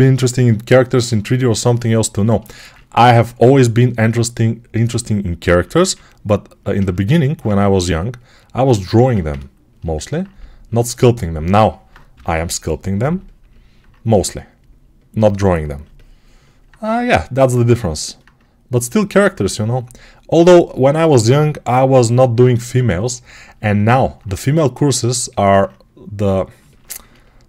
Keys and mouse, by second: 3.2 2, 5.5 1, 6.5-15.6 alt+shift+right drag, 7.3 2, 8.8 1, 12.0 g, 15.7-25.1 alt+right drag, 24.0 alt+click, 25.1 alt+click, 25.2-27.4 right drag.